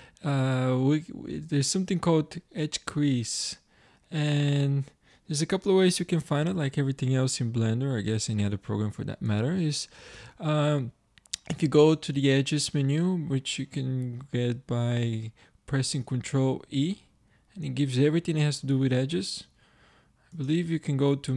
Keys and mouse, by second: 9.3 ctrl+e, 16.1 ctrl+e.